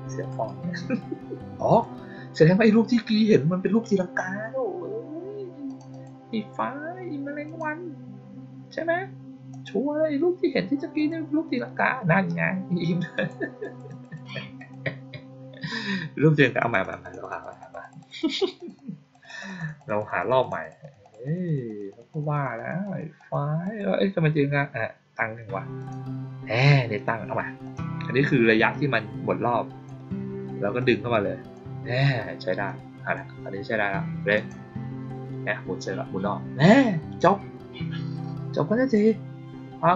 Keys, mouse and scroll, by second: 0.2 right click, 1.6 click, 5.6 click, 5.8 click, 7.4 click, 9.4 click, 10.9 click, 13.1 click, 13.5 click, 13.8 click, 14.0 click, 14.5 click, 16.5 click, 16.7 click, 16.9 click, 17.1 click, 17.3 click, 17.5 click, 17.7 click, 17.9 click, 18.1 click, 18.3 click, 18.5 click, 18.7 click, 19.1 click, 19.3 click, 19.5 click, 19.7 click, 19.9 click, 20.1 click, 20.3 click, 20.5 click, 20.7 click, 20.9 click, 21.1 click, 21.4 click, 21.6 click, 21.8 click, 22.0 click, 22.2 click, 22.5 click, 22.7 click, 23.1 click, 23.5 click, 25.7 click, 27.5 click, 28.6-29.8 drag, 30.7-31.4 drag, 32.6-33.0 drag, 34.2 click, 38.8 click.